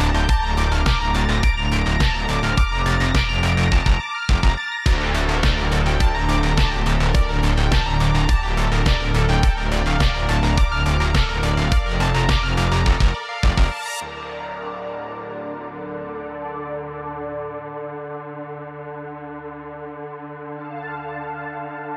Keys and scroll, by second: 0.6 space, 6.2 super+z, 8.3 space, 8.4 space, 10.4-12.4 typing, 13.9 w, 16.4 super+z, 19.0 super+z.